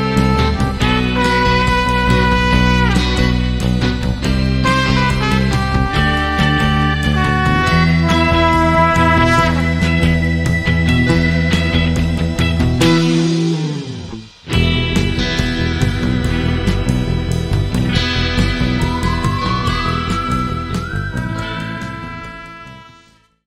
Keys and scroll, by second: 15.3 Escape.